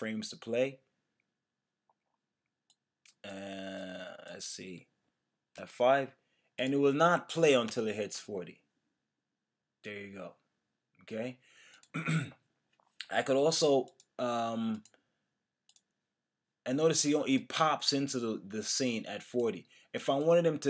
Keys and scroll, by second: 5.6 F5, 7.7 Return.